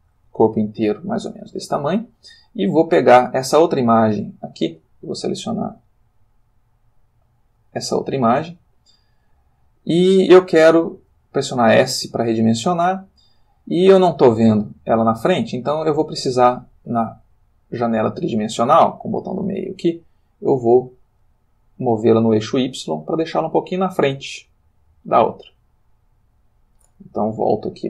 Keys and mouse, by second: 0.3 s, 0.7 click, 2.5 click, 3.5 g, 4.2 click, 4.8 click, 6.5 click, 7.9 g, 10.8 click, 11.1 s, 11.8 click, 12.0 g, 15.7 click, 17.3-19.6 middle drag, 20.5 click, 22.0-23.2 drag, 23.4-25.1 middle drag, 25.6-26.6 middle drag.